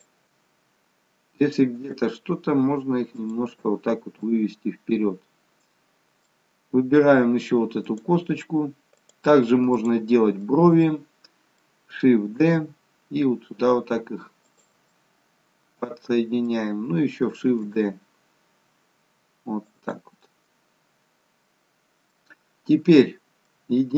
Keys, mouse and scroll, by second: 0.0 shift+click, 2.0 g, 4.2 middle click, 7.9 click, 10.5 middle click, 12.5 shift+d, 14.9 middle click, 17.5 shift+d, 20.4 middle click.